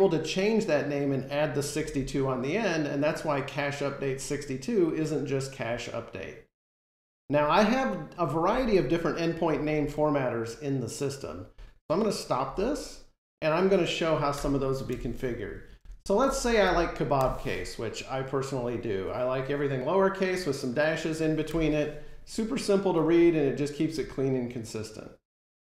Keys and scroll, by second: 17.1 Return, 21.3 F5.